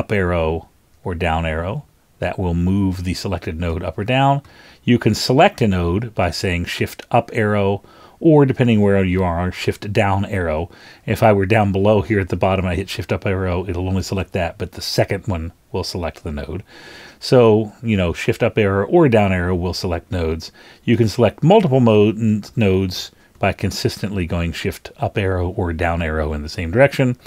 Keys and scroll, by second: 0.9 shift+super+Down, 1.6 shift+super+Down, 2.2 shift+super+Up, 2.9 shift+super+Up, 3.7 shift+super+Down, 6.5 shift+Up, 9.1 shift+Down, 12.8 shift+Up, 14.8 shift+Up, 17.5 shift+Up, 21.1 shift+Up, 21.6 shift+Up, 21.9 shift+Up, 22.5 shift+Up, 23.3 shift+Up.